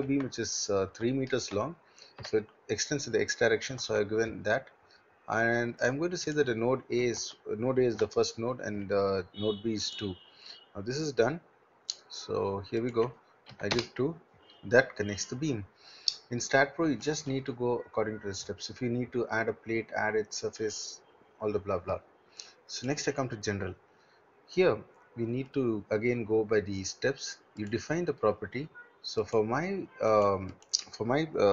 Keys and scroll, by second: 0.0 0, 0.1 Tab, 2.2 3, 3.7 Tab, 7.1 1, 7.2 Tab, 8.0 2, 13.5 2, 13.8 Return.